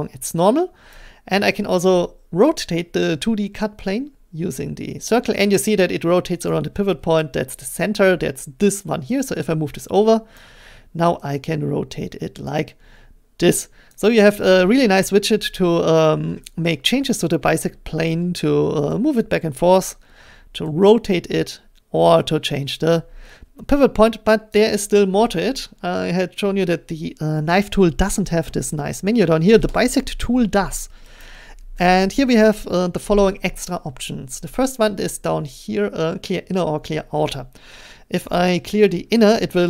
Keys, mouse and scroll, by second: 0.9-6.1 drag, 10.3 click, 13.6-15.4 drag, 16.5-18.1 drag, 18.1-19.7 middle drag, 19.7-20.8 drag, 20.8 middle click, 22.7 click, 24.5 click, 25.8 click, 27.6-28.0 scroll, 31.2 click.